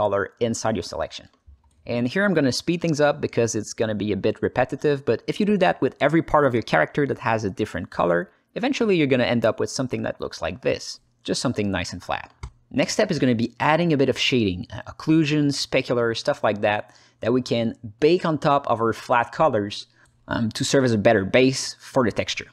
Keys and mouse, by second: 1.3 alt+shift+middle click, 1.6 shift+l, 1.7 alt+shift+middle click, 2.7-3.8 drag, 4.4 alt+middle click, 4.8 drag, 7.0 click, 9.5 drag, 9.8-12.4 alt+middle drag, 13.4-17.0 alt+middle drag, 17.4 KP_0, 19.3-20.7 ctrl+alt+middle drag.